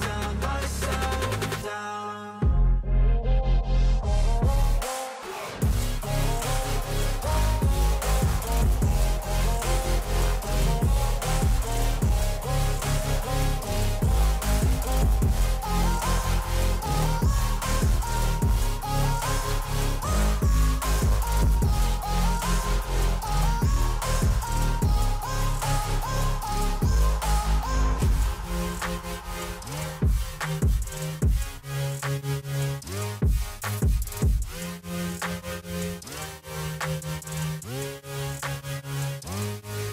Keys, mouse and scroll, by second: 6.9-8.6 scroll down 3, 9.0 ctrl+t, 20.1 ctrl+z, 20.6 shift+click, 24.3 shift+click, 27.3 ctrl+t, 27.7 ctrl+click, 30.3 double click, 38.6-39.4 scroll down 12, 39.4-39.9 scroll up 18.